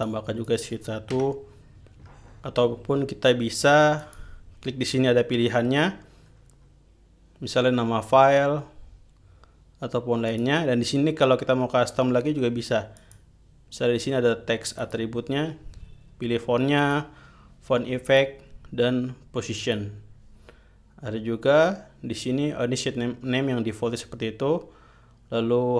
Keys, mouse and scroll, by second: 0.5 click, 1.7 BackSpace, 4.5 click, 6.8-7.1 scroll down 2, 10.9 click, 13.5 click, 15.3 click, 17.3 click, 18.6 click, 20.1 click.